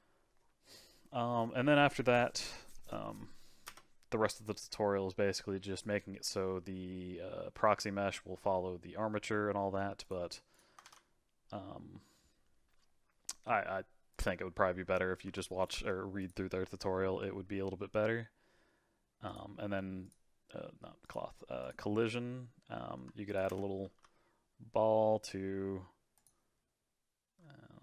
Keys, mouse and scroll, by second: 3.7 space, 10.0-10.8 drag, 10.8 shift+a, 14.7-15.2 scroll down 4, 15.2 s, 15.7 g, 19.3 click, 20.0-22.2 drag, 22.2-23.0 scroll up 3, 23.0 s, 23.5 space, 23.8 g.